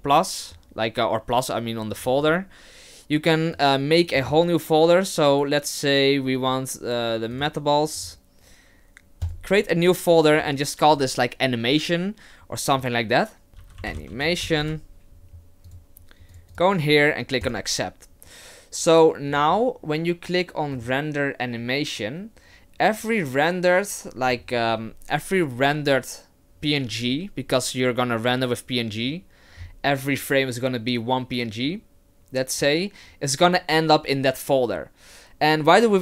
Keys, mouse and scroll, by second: 20.7 click.